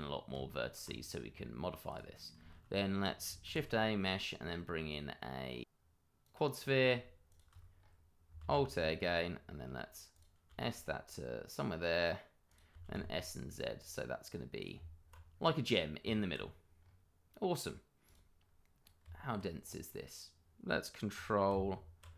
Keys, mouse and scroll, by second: 0.3 Tab, 0.9-1.3 scroll down 1, 1.9 click, 3.4 shift+a, 6.2 click, 6.5-7.0 scroll down 1, 7.3 shift+click, 7.3 click, 7.7-8.3 scroll up 1, 8.4 alt+a, 8.7-9.1 scroll up 1, 9.6-10.1 scroll up 1, 10.1 click, 10.5 s, 12.4 click, 12.7 s, 12.9 z, 14.6 click, 14.7 Tab, 15.3 scroll down 1, 15.6 click, 16.0 Tab, 16.7-18.0 scroll up 1, 18.0 click, 18.4-18.8 scroll up 1, 19.0 Tab, 19.6-21.5 scroll up 1, 21.5 Tab.